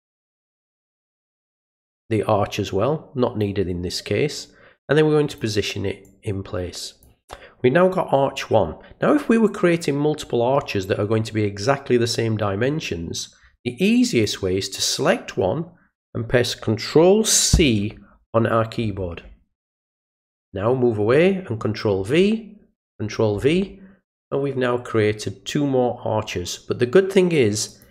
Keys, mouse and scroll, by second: 4.3-5.4 drag, 6.0 click, 14.0 click, 20.3 click, 22.8 click, 27.7 click.